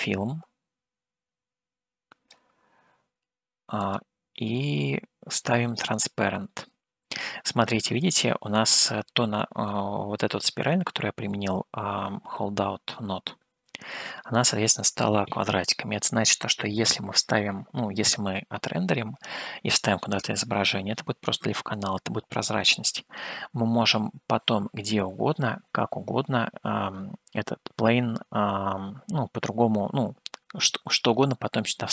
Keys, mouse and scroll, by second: 4.0 click, 5.9 click, 8.0 scroll up 2, 9.8-11.3 middle drag, 13.4-13.7 scroll up 1, 14.3-15.4 middle drag.